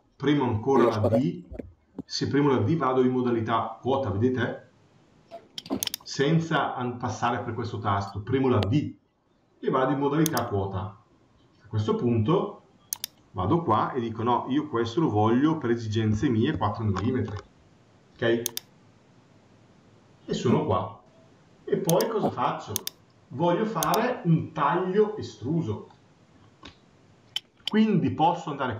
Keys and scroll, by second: 16.3 Return.